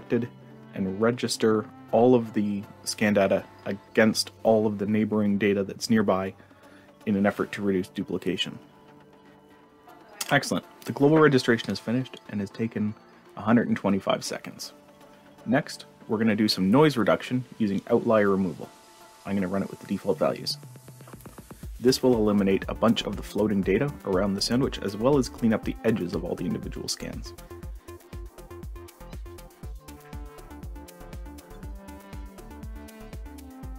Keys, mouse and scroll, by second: 11.9 click, 16.0 click, 17.6 click, 18.1 click, 18.5 click, 18.8 click.